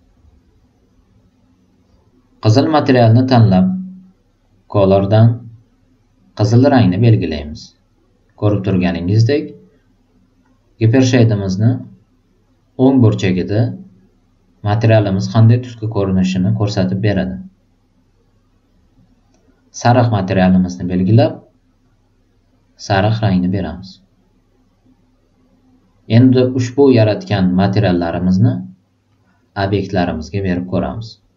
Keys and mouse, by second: 1.7 click, 2.8 click, 5.1 click, 6.5 click, 20.4 click, 21.8 click, 23.0 click, 26.9-27.7 drag, 29.0-31.3 drag.